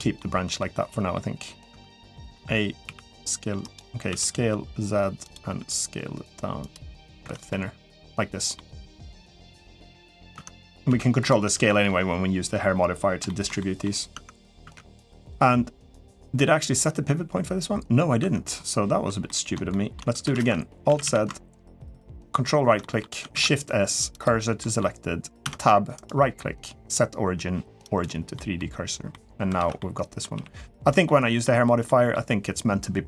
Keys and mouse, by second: 0.4 middle click, 1.5 Tab, 2.1 a, 2.6 s, 3.9 s, 5.3 s, 7.0 Tab, 7.3-8.4 middle drag, 8.8 middle click, 10.1 Tab, 10.7 s, 11.2 Tab, 11.4 middle drag, 13.0 shift+middle drag, 13.4 middle drag, 13.9 Tab, 14.4 Tab, 18.0 Tab, 19.0 middle click, 19.5 shift+middle click, 20.1 alt+z, 20.7 a, 20.8 a, 21.7 ctrl+right click, 22.6 middle click, 23.1 shift+s, 24.4 middle click, 25.2 Tab, 25.8-27.8 right drag, 28.1 middle drag, 28.9 middle drag, 29.3 alt+z, 29.6-30.0 middle drag, 30.1 g, 30.8-31.2 middle drag, 31.6 middle click.